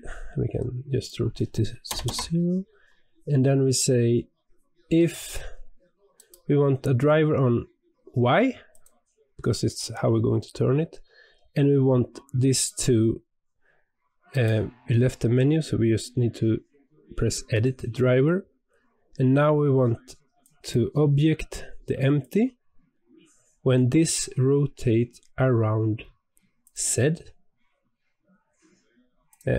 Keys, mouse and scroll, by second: 0.9-3.9 drag, 6.1-17.5 right drag.